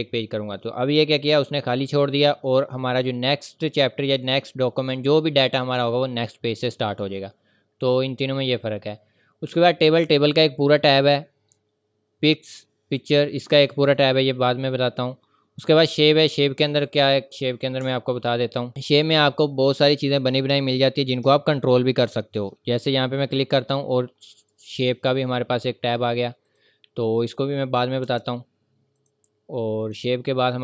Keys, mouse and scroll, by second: 2.5 scroll down 1, 6.7 scroll up 1, 15.8 click, 17.9 ctrl+scroll up 1, 18.4 ctrl+scroll up 1, 18.7 scroll down 1, 18.7 click, 19.7 scroll down 1, 20.6 click, 23.6 click, 26.4 click, 28.0 Delete, 29.0 click.